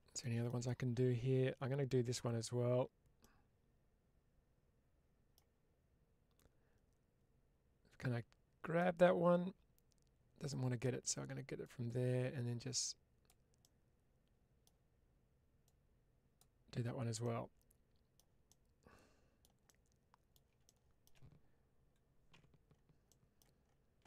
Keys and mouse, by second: 0.1 shift+middle click, 3.1-5.2 middle drag, 8.6-10.4 middle drag, 11.5-13.1 drag, 13.5-14.5 middle drag, 15.5 click, 17.1-18.0 middle drag, 18.3-20.2 middle drag, 22.9 middle click, 23.9 shift+middle click.